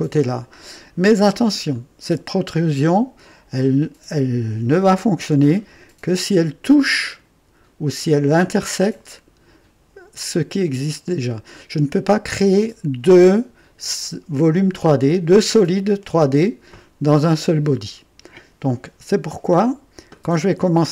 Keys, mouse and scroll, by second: 1.7-2.5 right drag.